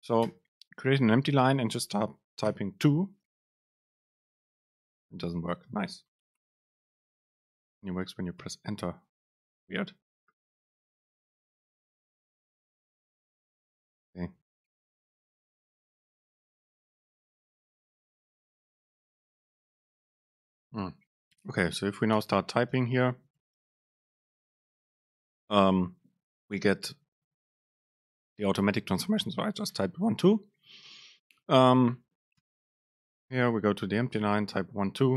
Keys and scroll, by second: 0.4 Return, 4.3 super+space, 6.6 Return, 7.5 BackSpace, 7.9 super+space, 15.6 BackSpace, 16.8 Return, 17.0 super+space, 21.5 BackSpace, 23.0 Return, 31.8 BackSpace, 33.4 Return.